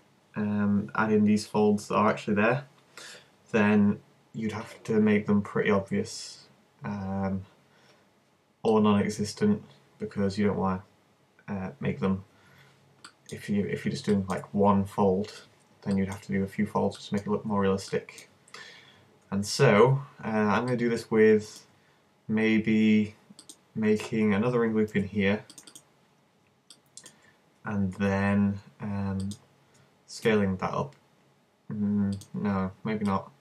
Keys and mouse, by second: 24.9 ctrl+r, 25.8-27.6 drag, 29.2-30.3 middle drag, 30.3 s, 30.6 click, 32.2-33.4 drag.